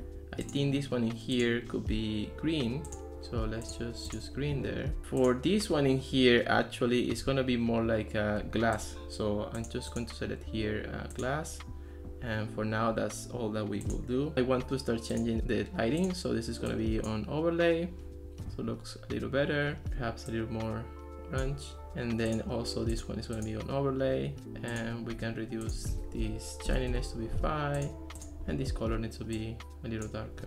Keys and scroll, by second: 26.2 4, 26.7 BackSpace, 26.9 Return, 26.9 5.